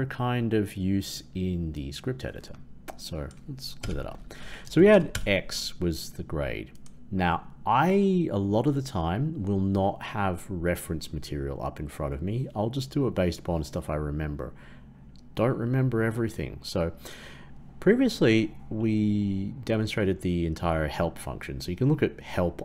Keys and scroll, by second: 5.1 ctrl+Return.